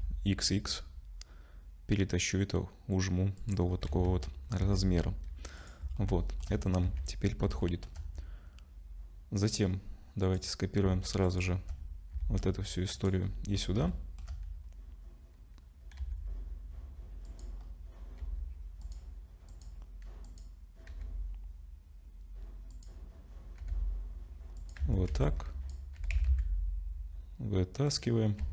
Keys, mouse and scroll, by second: 3.7-4.6 scroll down 6, 3.9 Tab, 4.6 ctrl+s, 5.6 click, 6.0 shift+middle click, 6.9 ctrl+s, 7.6 shift+middle click, 10.2 click, 11.2 shift+click, 12.2 shift+d, 13.2-13.8 scroll up 7, 13.9 shift+middle click, 14.6-15.3 scroll up 1, 16.0 s, 17.6 scroll up 3, 18.2 s, 19.5 click, 20.9 g, 24.8 Tab, 24.8 g, 25.1 1, 25.2 click, 26.0 g, 28.4 Tab.